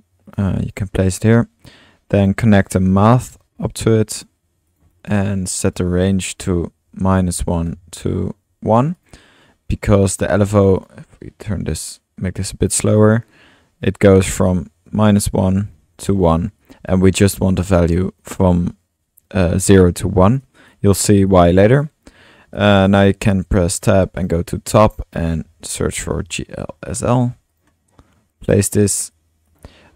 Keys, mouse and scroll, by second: 0.3 click, 0.6 drag, 0.9 click, 2.1-2.7 drag, 2.6 Tab, 2.9-3.6 typing, 4.2 drag, 4.7 drag, 4.9 click, 5.6-8.4 drag, 9.7 middle click, 10.0-10.3 drag, 10.8 click, 13.1-14.9 drag, 14.9 space, 16.6-17.8 drag, 20.3 typing, 20.4-22.1 drag, 22.1 middle click, 22.6-23.2 drag, 22.6 typing, 23.5 Tab, 24.2 drag, 25.2-26.7 typing, 27.5 click, 29.1-29.9 drag.